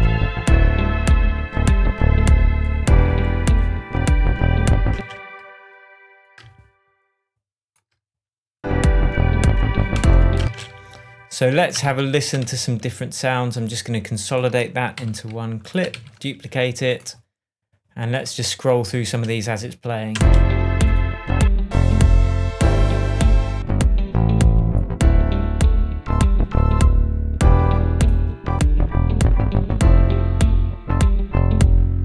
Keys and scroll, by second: 4.9 space, 9.9 shift+Tab, 10.4 shift+space, 11.8 super+d, 12.4 super+z, 14.9 super+j, 15.9 super+d, 20.1 space.